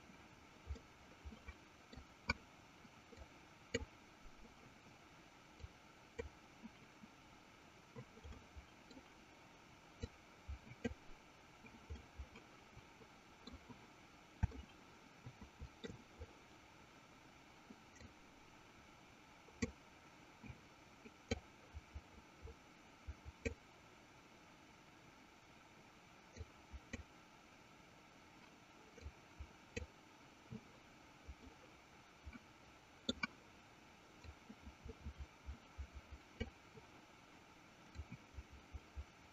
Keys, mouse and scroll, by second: 0.9-2.4 middle drag, 3.7 click, 6.3 click, 8.5 middle click, 10.8 click, 12.2-13.8 middle drag, 14.8-16.0 shift+middle drag, 18.4-20.5 drag, 22.0-23.9 drag, 26.7 click, 29.4-30.5 drag, 31.8-33.4 middle drag, 34.8-37.3 drag, 38.6-39.3 drag.